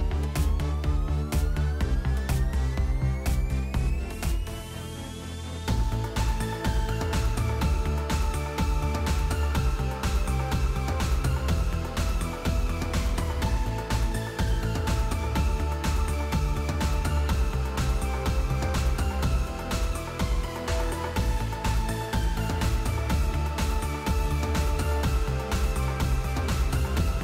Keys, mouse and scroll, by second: 0.0-3.2 typing, 2.0 click, 4.1 click, 4.8-5.6 typing, 5.8 Return, 7.0-7.7 typing, 8.8 space, 9.1 middle click, 9.3 space, 10.5 space, 10.9-11.2 scroll, 12.9 click, 14.0 click, 15.0 click, 16.0 click, 16.5-17.8 typing, 18.4 Tab, 19.2-20.5 typing, 21.7 Tab, 22.1-23.5 typing.